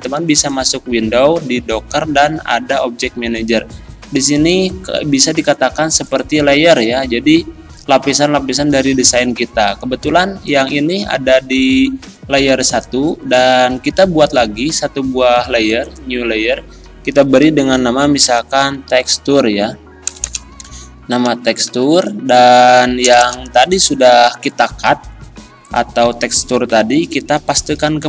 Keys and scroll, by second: 18.3-19.1 typing, 20.1 BackSpace, 21.3 u, 21.7 r, 23.0-24.3 typing, 27.5 ctrl+v.